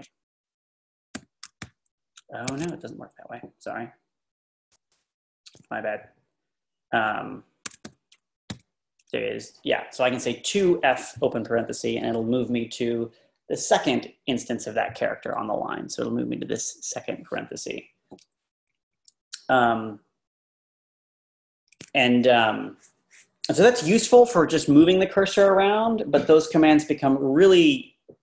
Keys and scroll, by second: 0.9-4.5 typing, 7.5-8.5 typing, 18.6 Left, 24.2 Right.